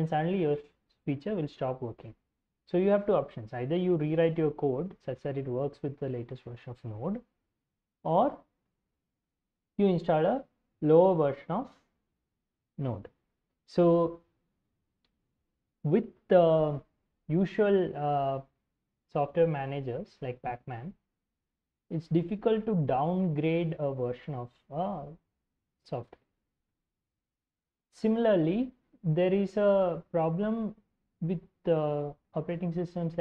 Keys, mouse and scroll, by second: 20.4-22.2 drag, 26.0-28.7 drag.